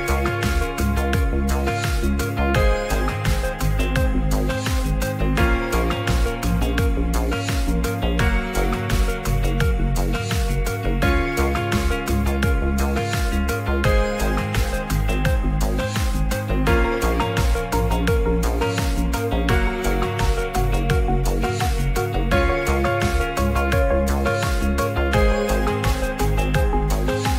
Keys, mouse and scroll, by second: 0.2-0.7 drag, 0.7 q, 1.9 q, 2.7 s, 3.8 click, 4.3 g, 4.5 z, 6.8 scroll up 1, 6.9 middle click, 7.0 scroll down 1, 7.2 ctrl+s, 7.7 click, 8.0 middle click, 8.3-8.7 middle drag, 9.4 ctrl+a, 10.8 click, 11.9-14.1 shift+drag, 14.7 ctrl+s, 14.9-15.4 middle drag, 16.5 middle click, 17.1 Tab, 17.8 alt+click, 18.7 g, 18.8 g, 20.7 click, 20.8 Tab, 21.1-21.6 middle drag, 22.3 shift+right click, 22.7 shift+a, 25.7 click, 26.5-27.3 drag.